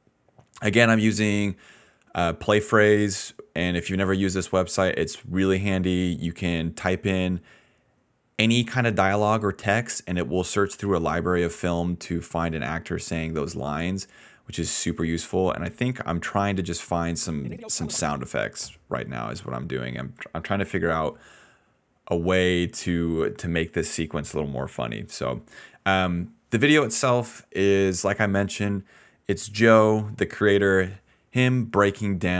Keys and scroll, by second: 0.0-2.4 typing, 3.5-4.6 typing, 5.8-7.1 typing, 9.1-12.2 typing, 17.3 ctrl+s, 17.4 space, 18.1 space.